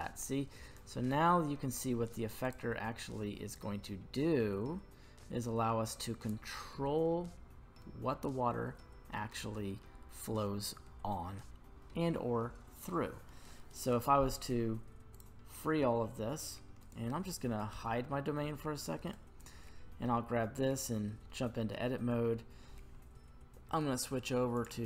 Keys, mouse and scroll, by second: 2.4 click, 3.5-6.3 drag, 6.6-9.8 middle drag, 15.1-15.5 drag, 16.8 right click, 17.8 h, 19.1-19.9 right drag, 20.7 Tab, 21.3 middle click, 22.1-23.7 scroll up 3, 24.5 click.